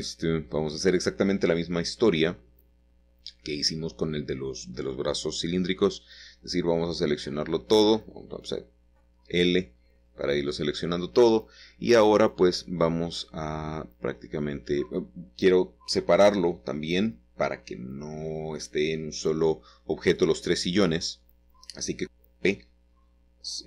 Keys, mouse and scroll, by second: 1.9 i, 5.2 i, 6.9 p, 7.5 click, 8.5-9.9 middle drag, 12.1 ctrl+z, 15.8 l, 16.2 l, 16.7-18.2 middle drag, 18.9 shift+middle click, 19.6 shift+middle click, 20.0 scroll up 1, 21.0 shift+middle click.